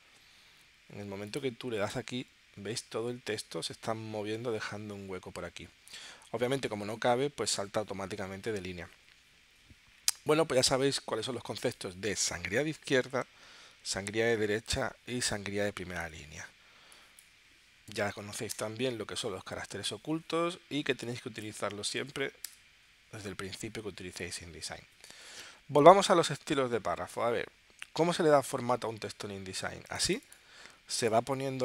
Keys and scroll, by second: 17.9 0, 18.5 Return, 22.0 0, 22.5 Return.